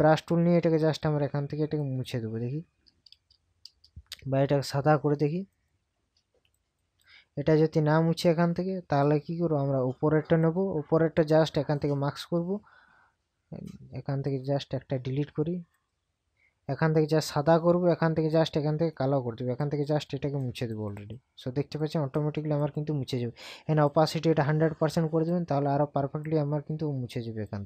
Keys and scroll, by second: 3.1 ctrl+KP_Add.